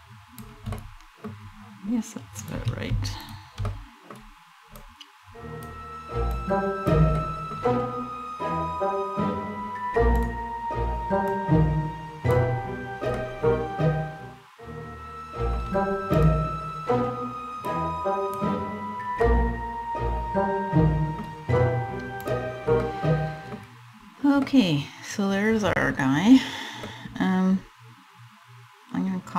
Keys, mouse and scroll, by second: 0.3 middle click, 2.0 right click, 2.7 shift+right click, 3.3 middle click, 4.4 click, 5.9 click, 6.8 middle click, 9.8 right click, 10.9 click, 12.8 middle click, 15.8 right click, 17.3 click, 18.9 middle click, 20.9 scroll up 1, 21.9 right click, 22.5 middle click, 24.1 middle click, 26.5 middle click, 26.9 middle click.